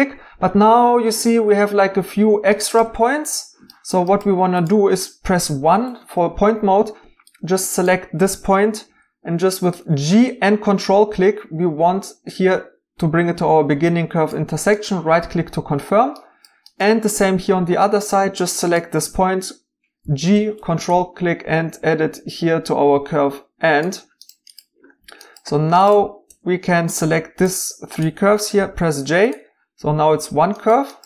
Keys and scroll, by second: 5.2 1, 8.8 g, 20.0 g, 26.3 2, 28.6 j.